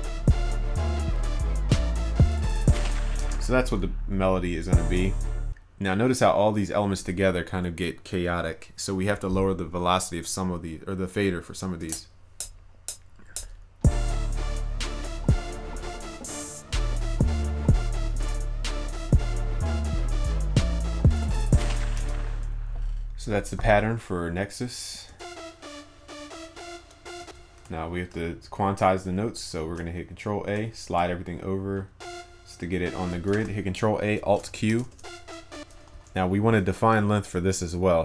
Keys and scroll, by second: 29.7 ctrl+a, 33.4 ctrl+a, 34.5 alt+o, 36.0 ctrl+a.